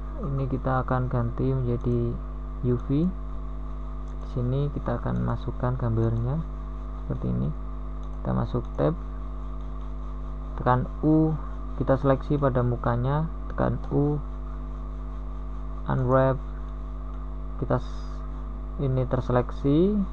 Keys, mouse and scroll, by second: 12.3 middle click, 14.7 u, 15.7 KP_1, 19.0 u.